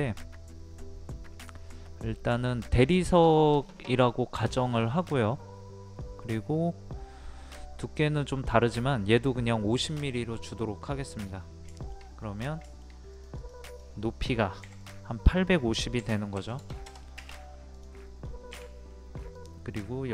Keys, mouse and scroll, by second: 3.6 scroll down 1, 4.9-6.9 scroll up 1, 9.8-10.1 scroll down 1, 11.0 scroll up 1, 11.2 scroll down 1, 11.3-11.7 scroll up 1, 11.7 middle click, 12.7 shift+middle click, 13.1 click, 16.0 KP_8, 17.7 click, 18.2 scroll up 1, 18.5 r, 19.3-20.1 drag.